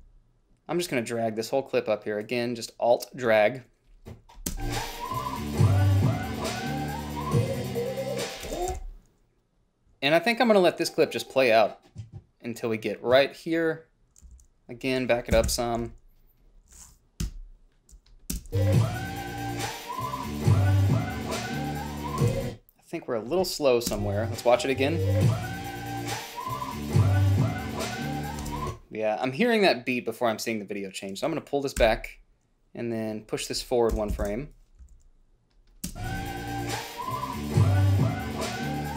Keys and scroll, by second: 4.8 space, 8.8 space, 9.1 h, 14.6 a, 15.6 Left, 15.8 g, 16.1 a, 17.6 Delete, 18.7 space, 22.5 space, 24.2 space, 28.8 space, 32.1 ,, 34.2 KP_Add, 34.5 KP_1, 34.5 Return, 35.1 a, 36.2 space.